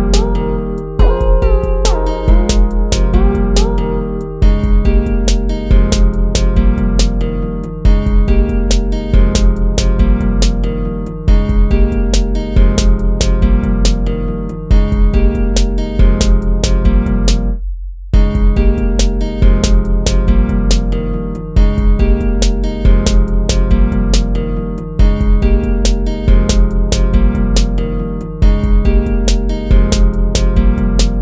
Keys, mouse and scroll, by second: 6.4 ctrl+-, 15.6 ctrl+-, 16.8 ctrl++, 17.5 ctrl+z, 28.3 ctrl+-.